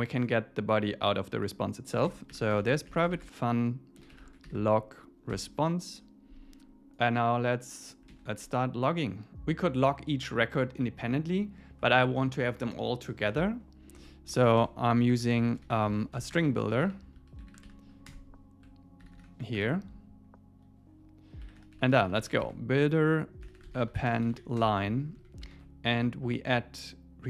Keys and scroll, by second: 2.0 Return, 5.3 Tab, 9.1 super+s, 11.8 Tab, 14.0 Tab, 18.1 Return, 19.6 Return, 24.6 Return, 25.2 Left.